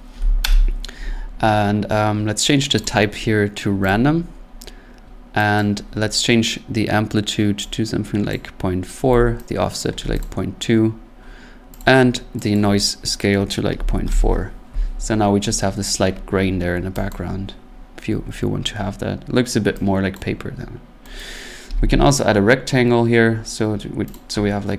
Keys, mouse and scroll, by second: 0.4 Return, 1.4 middle click, 1.9 middle click, 2.8 click, 3.9 click, 4.5 middle click, 4.8 middle click, 5.6 click, 8.3 click, 9.0 4, 9.8 click, 10.0 2, 10.2 click, 11.8 click, 12.5 click, 13.7-14.0 typing, 14.1 Return, 14.9 scroll, 16.1-16.7 scroll, 17.1 click, 19.0 scroll, 20.1 click, 21.2 right click, 21.7-22.1 typing, 24.1 click.